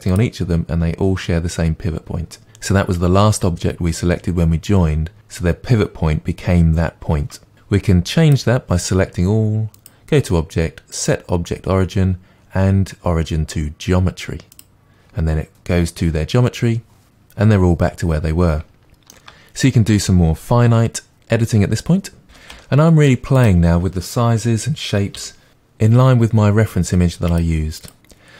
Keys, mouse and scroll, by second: 8.3 click, 14.6-18.8 drag, 18.8-22.5 shift+middle drag, 19.9-22.5 scroll up 2, 22.5 click, 22.6 Tab, 22.9 click, 23.1 g, 23.2-24.6 middle drag, 23.4 g, 24.6 click, 24.8 Tab, 25.0-26.7 typing, 25.5 shift+middle click, 26.2 click, 27.8 click, 28.0-28.3 typing.